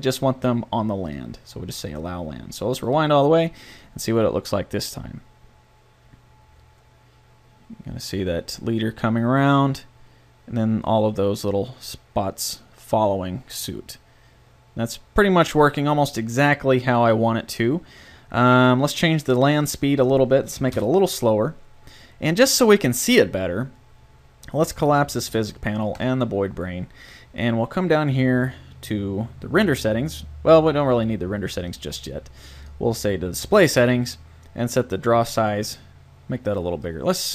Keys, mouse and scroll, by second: 15.5-17.3 drag, 19.5-21.3 drag, 24.9-27.7 drag, 31.7-34.4 drag.